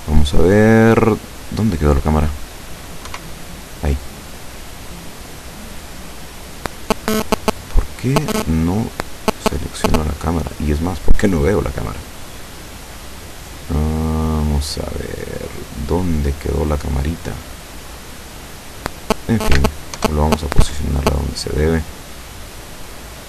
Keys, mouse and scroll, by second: 0.2-2.1 middle drag, 3.1 0, 4.6-5.5 scroll down 2, 5.6 right click, 6.6-7.2 scroll down 2, 7.2-8.4 middle drag, 8.6 scroll down 2, 8.9-10.4 middle drag, 10.4-10.7 scroll down 2, 11.2-14.2 middle drag, 14.4-14.9 scroll down 2, 15.7 scroll down 2, 16.3-16.7 scroll down 2, 16.9-18.4 middle drag, 18.4-18.7 scroll down 2, 20.0 ctrl+alt+KP_0, 21.4-21.8 scroll down 2, 22.5 right click.